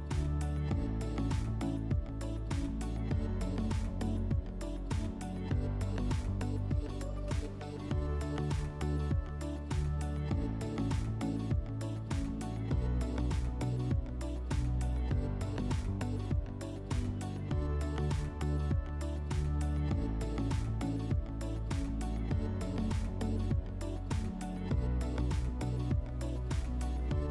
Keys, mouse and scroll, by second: 1.1 click, 4.6 click, 16.1-18.1 drag, 23.8-25.0 drag, 26.0 click, 26.5 alt+w.